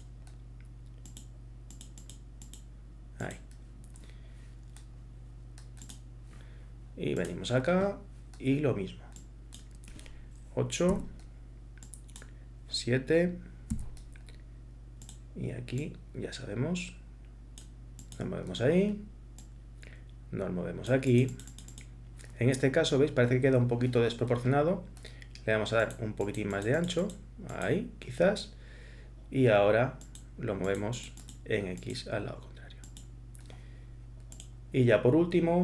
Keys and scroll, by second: 10.9 8, 13.7 7.